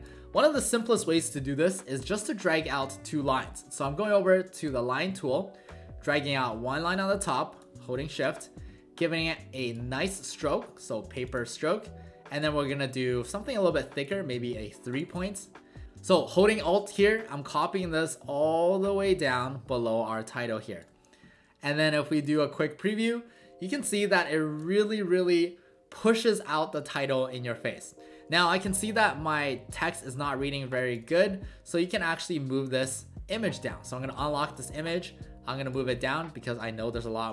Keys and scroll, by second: 8.1 shift+Down, 15.8 ctrl+z, 22.4 w, 24.2 alt+space, 28.6 space.